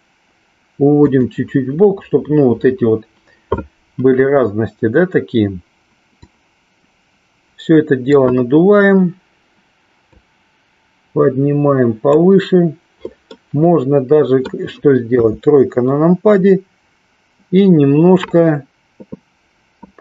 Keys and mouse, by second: 1.1 click, 6.1-8.1 drag, 10.0-12.3 drag, 13.3-14.5 middle drag, 15.3 KP_3.